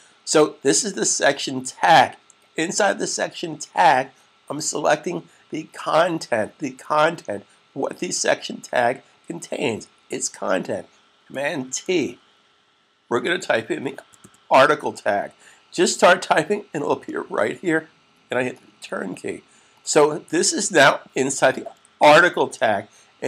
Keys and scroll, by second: 11.6 super+t, 13.0-14.6 typing, 22.0 shift+s.